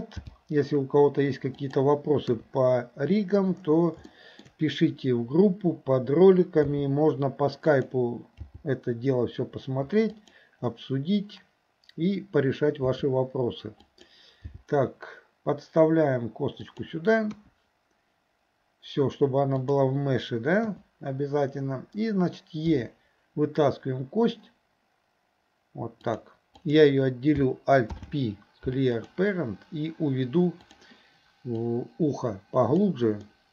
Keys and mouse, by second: 0.2 g, 2.3 KP_3, 4.2 shift+middle click, 6.7 s, 8.5 g, 12.9 s, 14.5 g, 17.4 KP_1, 19.7 click, 20.7 KP_3, 22.7 e, 27.9 alt+p, 30.7 click, 31.7-32.9 drag, 33.3 middle click.